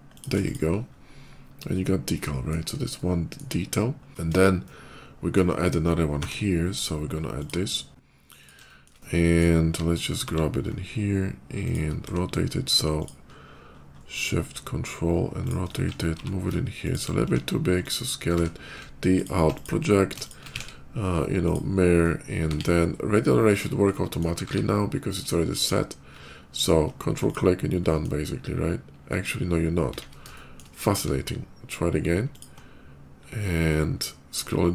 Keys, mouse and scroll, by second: 0.0 shift+click, 0.3 shift+click, 0.5 shift+middle click, 0.7 shift+middle click, 1.5 shift+middle click, 2.8 shift+middle click, 4.5 shift+middle click, 6.0 d, 7.2 click, 7.9 s, 8.2 click, 8.5 shift+middle click, 8.8 shift+middle click, 9.4 scroll up 1, 10.4 g, 11.5 click, 11.9 d, 12.8 ctrl+shift+click, 13.1 ctrl+shift+middle click, 13.3 ctrl+shift+middle click, 13.6 ctrl+shift+middle click, 14.0 ctrl+shift+middle click, 15.9 g, 16.6 ctrl+g, 16.7 click, 17.1 s, 17.7 click, 18.2 d, 19.0 alt+click, 19.4 alt+click, 20.1 shift+click, 20.4 alt+x, 21.3 click, 22.4 q, 23.2 click, 23.7 middle click, 26.3 ctrl+click, 27.1 ctrl+click, 27.7 ctrl+middle click, 30.2 ctrl+shift+z, 30.2 shift+middle click, 30.8 q, 32.2 ctrl+click, 33.5 ctrl+middle click.